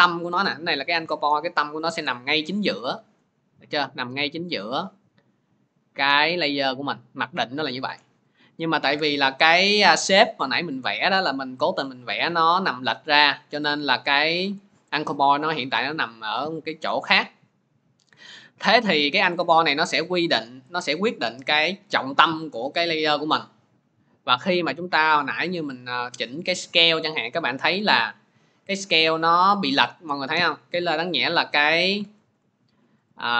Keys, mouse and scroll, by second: 1.6-2.4 scroll, 2.8 scroll, 5.3 scroll, 6.8 middle click, 8.2 click, 8.8 Delete, 9.9 middle click, 11.0 click, 11.4 middle click, 11.9-12.4 scroll, 14.1-16.2 scroll, 17.4-18.9 scroll, 24.2-26.3 middle drag, 29.6 click, 29.9-32.0 middle drag, 32.0 ctrl+z, 32.9 click, 32.9 scroll.